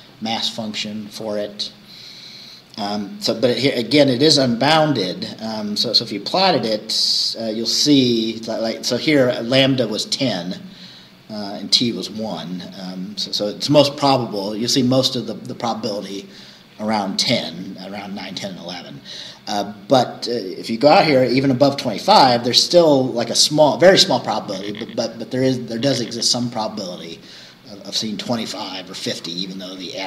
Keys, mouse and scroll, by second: 0.7 scroll down 2, 2.8-3.1 scroll down 2, 5.3 scroll down 2.